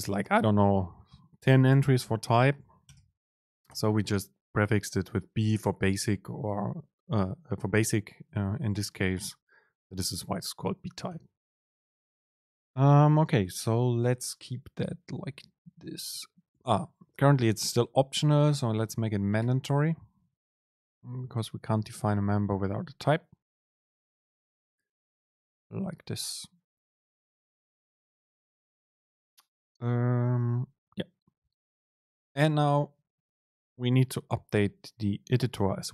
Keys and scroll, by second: 15.6 Down, 16.0 Up, 16.6 End, 16.9 Left, 18.2 Left, 18.2 super+space.